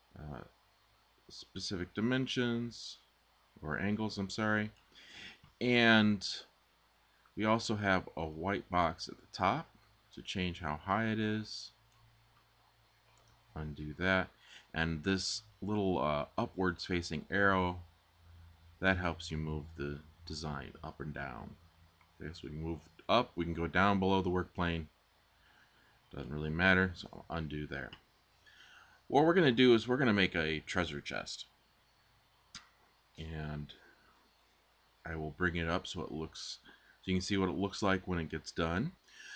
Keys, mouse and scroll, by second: 13.1 super+z, 26.7 super+z.